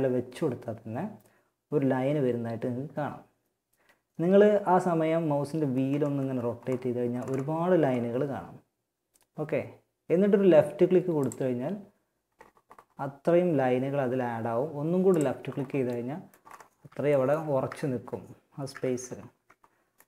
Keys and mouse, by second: 15.1 middle click, 15.9 z, 17.9 z.